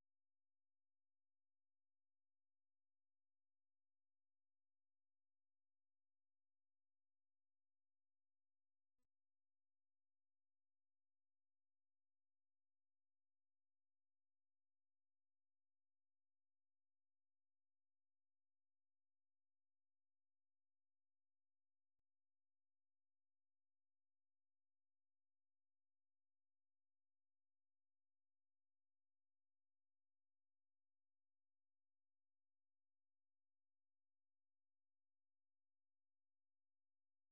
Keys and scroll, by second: 0.0-0.6 typing, 18.5 ctrl+c, 19.1 super+1, 19.8-24.2 typing, 21.7 ctrl+v, 24.2 ctrl+[, 26.3 super+2.